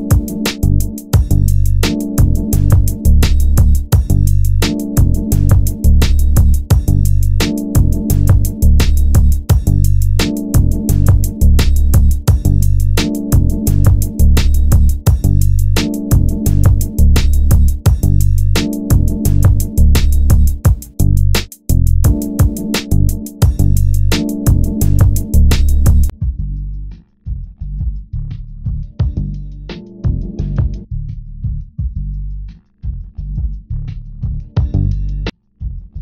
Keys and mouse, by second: 13.8 g, 17.4 click, 18.7 g, 24.7-27.5 drag, 26.9 g, 30.4 g, 30.7 g.